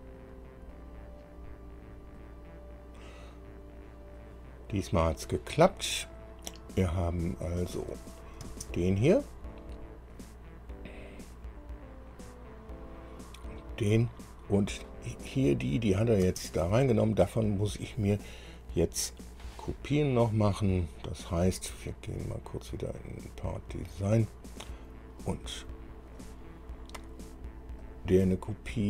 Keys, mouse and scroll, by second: 6.6 scroll down 2, 8.3 click, 8.7 space, 10.3 click, 12.8 click, 13.8 click, 14.5 scroll down 2, 15.7 click, 16.5 space, 22.5 click, 23.7 click, 25.8 click, 26.4 click, 28.1 click.